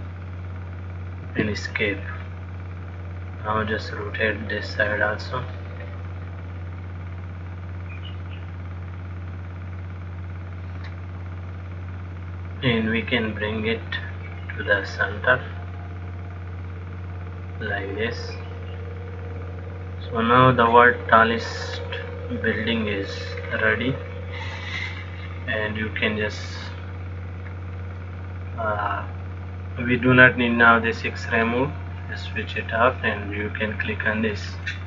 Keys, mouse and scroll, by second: 0.3 shift+d, 3.2 click, 12.5 click, 16.0 click, 18.8 click, 21.8 middle click, 23.6-24.6 scroll down 4, 31.5 click.